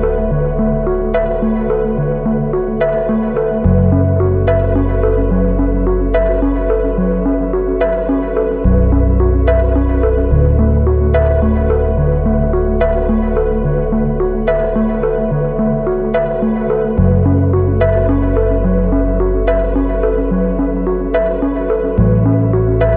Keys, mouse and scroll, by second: 0.2 Return, 10.6 ctrl+t, 15.9 ctrl+=, 16.2 ctrl+=, 17.5 space, 18.3 alt+shift+click.